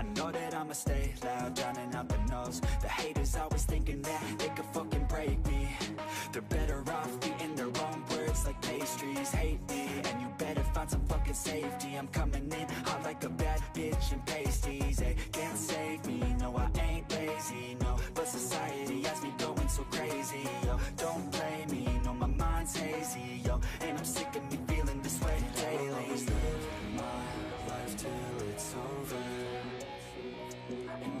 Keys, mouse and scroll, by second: 0.4-1.7 ctrl+drag, 1.7 scroll down 1, 2.0 shift+middle click, 2.9-5.5 ctrl+drag, 5.5-6.0 scroll down 1, 6.0-7.2 shift+middle drag, 7.2-10.3 scroll up 3, 7.4 shift+middle click, 10.3-13.5 ctrl+drag, 13.5 ctrl+z, 13.9-15.8 ctrl+drag, 15.8 scroll down 1, 16.0-17.1 shift+middle drag, 17.1 ctrl+z, 17.3 ctrl+z, 17.7 ctrl+z, 17.8 shift+middle click, 17.9-18.8 scroll up 5, 18.1 shift+middle click, 18.8-19.9 ctrl+drag, 20.4-21.4 ctrl+drag, 21.4-22.8 scroll down 1, 22.8 ctrl+click, 23.4 scroll up 1, 23.6 shift+middle click, 24.0-25.2 ctrl+drag, 25.4 ctrl+z, 25.9 ctrl+click, 27.5 scroll down 4, 27.7 shift+middle click, 28.2 ctrl+z, 28.4 ctrl+z, 29.3 shift+middle click, 29.5 scroll up 3, 29.6 shift+middle click, 30.0 ctrl+click, 30.8-31.2 scroll down 1.